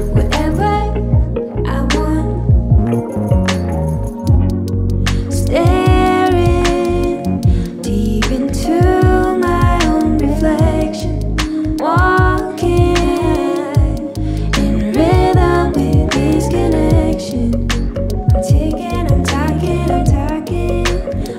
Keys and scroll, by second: 0.0 ctrl+g, 15.0 KP_1, 15.0 KP_5, 17.2 Up, 17.3 Up, 17.9 Up, 18.2 Up, 18.4 Up, 19.2 Up.